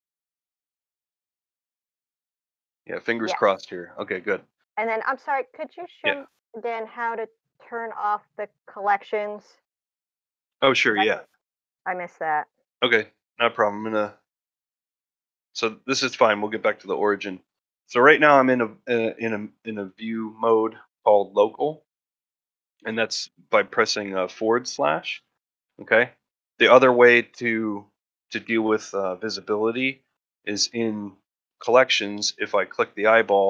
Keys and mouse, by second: 12.9-13.3 middle drag, 13.7 ctrl+middle drag, 14.0 ctrl+middle drag, 14.3 ctrl+middle drag, 14.6 ctrl+middle drag, 15.8 ctrl+middle drag, 16.1 shift+middle drag, 16.4 middle drag, 16.7 shift+middle drag, 17.0 middle click, 19.0-26.1 /, 20.4-21.1 middle drag, 26.1 middle drag, 26.5 shift+middle drag.